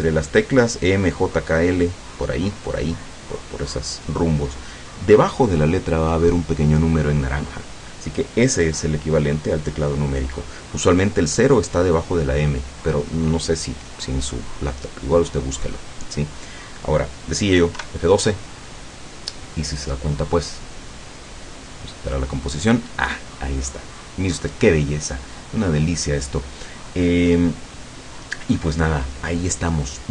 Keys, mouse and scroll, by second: 17.9 F12.